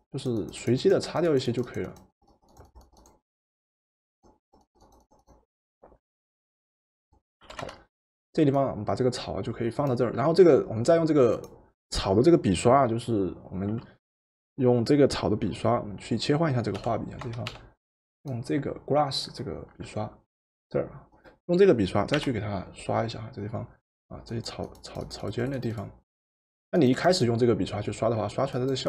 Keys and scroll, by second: 7.5 v, 16.8 b, 17.6 b, 22.1 Return.